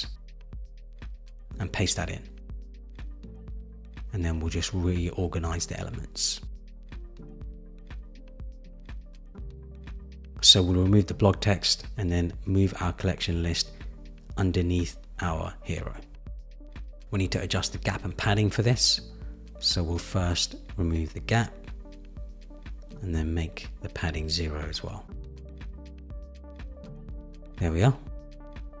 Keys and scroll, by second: 4.1 super+v, 19.7 Return, 22.1 Return, 24.6 Right, 25.2 Right, 26.2 Return.